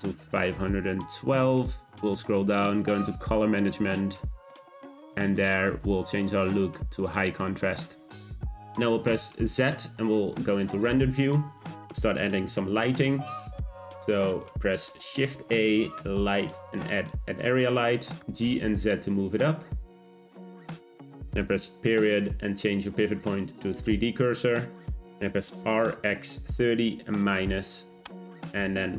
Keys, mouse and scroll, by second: 1.6-2.7 scroll down 10, 2.7-3.9 drag, 3.9-4.4 scroll down 1, 4.4-4.7 drag, 4.7-6.1 scroll down 9, 6.1-7.7 drag, 9.0 z, 14.8 shift+a, 18.5 g, 21.4 ., 25.6 r.